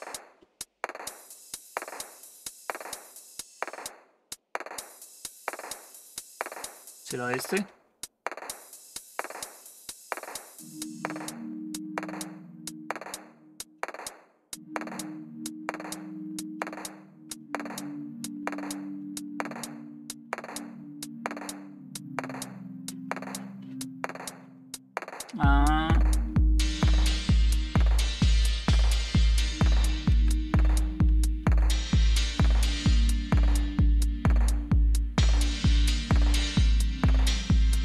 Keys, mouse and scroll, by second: 0.1 typing, 1.3 space, 2.2 space, 2.7 Down, 3.2 space, 4.8 typing, 6.5 Up, 30.7-32.5 typing.